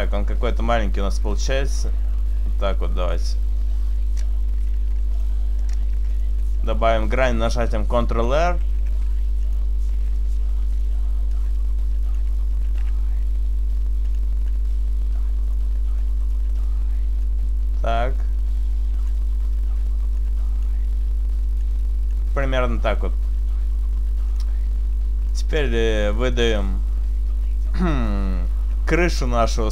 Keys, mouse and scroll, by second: 1.3 shift+right click, 1.8 click, 4.0 right click, 4.9 ctrl+r, 5.2 click, 6.0 ctrl+r, 6.5 right click, 8.3 s, 9.4 click, 10.2 right click, 10.7 e, 11.2 right click, 11.4 click, 12.7 s, 14.2 click, 15.5 right click, 16.0 shift+right click, 17.1 right click, 17.3 click, 19.7 right click, 20.3 click, 21.7 click, 24.4 click, 25.4 middle click, 26.4-27.3 scroll up 3, 27.3-28.4 scroll up 1, 28.9 a.